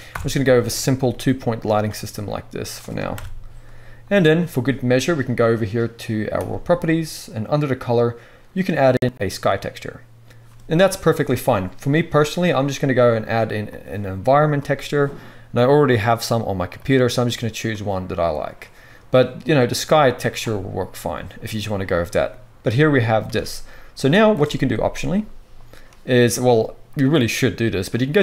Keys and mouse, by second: 0.0 KP_7, 0.6 click, 0.9 right click, 1.1 click, 1.1 g, 1.3-19.1 right drag, 1.8 r, 3.1 KP_0, 6.3-6.6 drag, 7.7-19.1 drag, 7.7-9.3 middle drag, 11.9-14.2 middle drag, 14.4 middle drag, 17.3-19.1 middle drag, 23.3 ctrl+s, 28.0 click, 28.0 middle click, 28.0 right click.